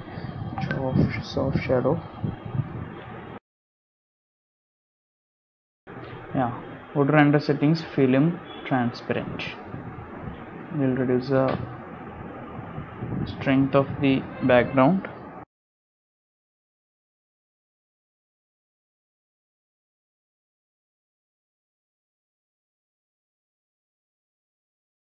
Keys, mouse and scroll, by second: 4.4 click, 5.5 click, 7.7 click, 8.9 click, 11.3 click, 14.4 click, 16.2 click, 18.7 shift+middle click, 19.0 shift+middle click, 19.3 space, 20.7 space, 24.5 space.